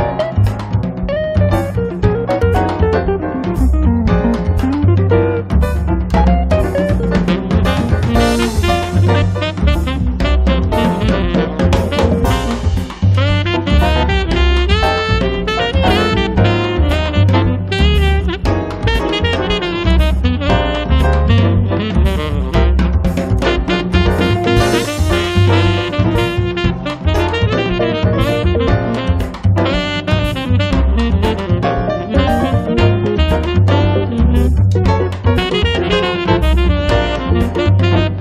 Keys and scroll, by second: 1.7 p, 3.1 1, 3.4 5, 3.8 Return, 4.7 space, 7.8 f, 8.8 5, 9.1 Return, 9.9 p, 11.8 space, 14.1 r, 16.7 space, 23.1 l, 28.0 space, 28.8 m, 30.3 Up, 31.7 l, 36.1 space.